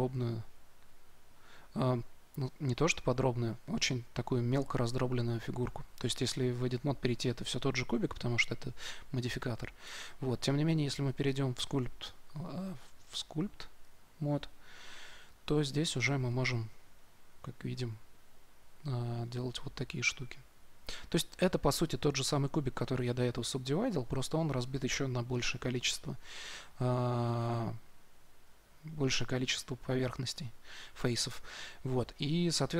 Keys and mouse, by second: 5.8 Tab, 9.7 Tab, 11.1-12.9 drag, 13.9-14.9 drag, 15.6-32.1 drag.